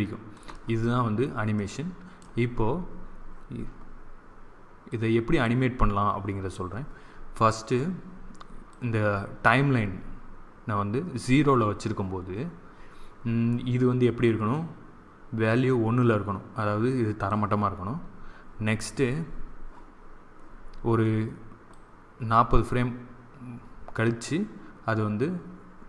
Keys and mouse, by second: 1.4-3.5 middle drag, 4.8-6.7 drag, 8.6-10.4 drag, 14.4-16.2 drag, 21.6-24.2 drag.